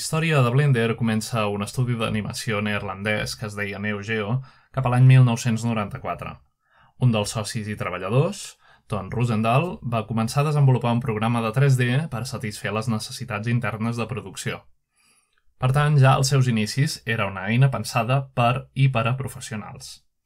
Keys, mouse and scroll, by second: 0.0 middle click, 0.0-0.3 scroll down 1, 3.4-8.4 drag, 10.7-14.1 drag, 16.4-18.0 drag.